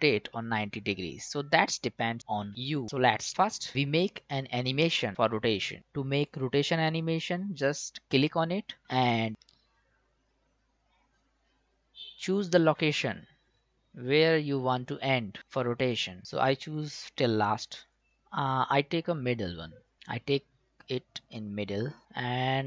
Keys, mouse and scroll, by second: 1.6 click, 8.1-15.4 drag, 18.0-19.9 drag, 20.8 click.